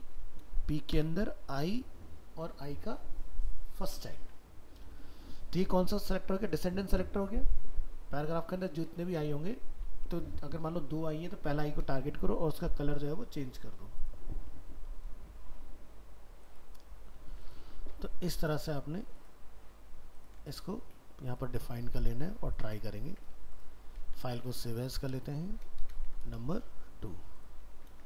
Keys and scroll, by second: 18.0 ctrl+s, 23.1 ctrl+Tab, 24.0 alt+f, 24.1 alt+移, 27.6 ctrl+a, 27.9 ctrl+c.